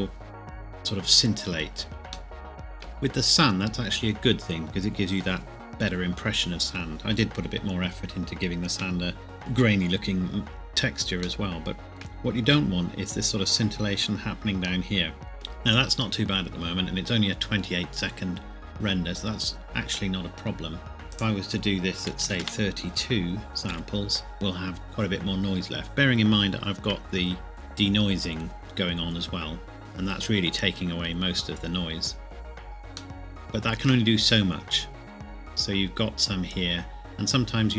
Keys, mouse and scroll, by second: 2.3 shift+middle click, 2.8 scroll down 1, 11.2 scroll down 1, 11.4 shift+middle click, 12.3 scroll up 1, 12.9 scroll down 1, 15.3 shift+middle click, 21.1 click, 22.2 KP_2, 22.4 KP_Enter, 23.7 F12, 33.1 shift+middle click, 36.9-37.7 scroll down 2.